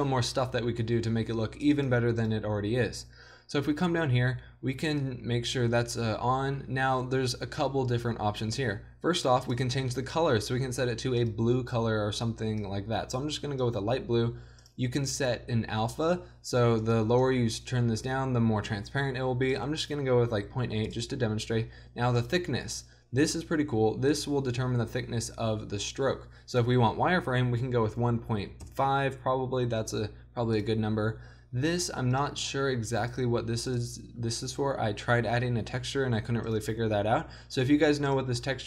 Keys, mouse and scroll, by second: 1.7-9.1 drag, 9.5-13.8 drag, 14.6-19.7 drag, 22.2-24.6 drag, 26.5-30.4 drag, 30.5-35.7 drag, 36.5-38.6 drag.